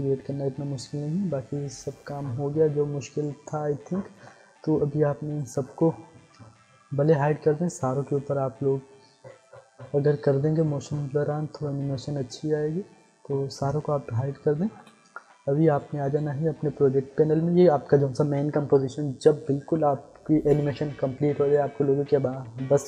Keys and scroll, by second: 14.6 ctrl+s.